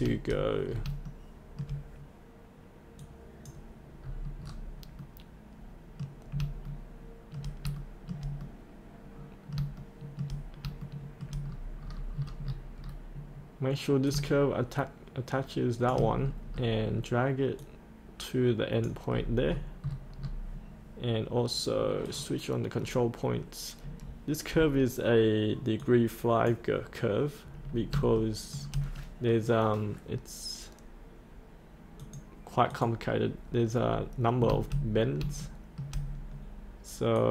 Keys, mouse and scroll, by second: 0.7 scroll up 1, 1.0 shift+middle click, 2.9 click, 4.0 scroll up 1, 5.0 middle click, 6.7 shift+middle click, 7.7 shift+middle click, 8.4 middle click, 9.7 shift+middle click, 10.7 shift+middle click, 11.4-14.2 scroll down 2, 14.2 click, 16.1-17.5 scroll down 1, 17.5-19.0 drag, 19.1-19.7 scroll up 1, 22.0-27.2 drag, 27.5 scroll down 1, 28.2 shift+middle click, 31.9 click, 33.7 scroll down 1, 35.0 scroll up 1, 35.4 shift+middle click, 37.1 click.